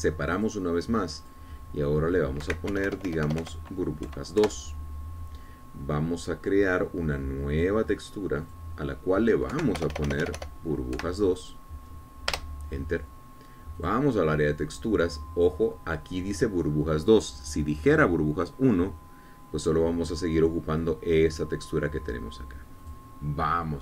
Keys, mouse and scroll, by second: 1.6 click, 2.4 click, 3.6 Right, 3.6 click, 3.9 BackSpace, 5.6 KP_Enter, 8.7 click, 9.6 click, 10.7 Right, 11.0 BackSpace, 12.2 KP_2, 13.5 Return, 15.0 click.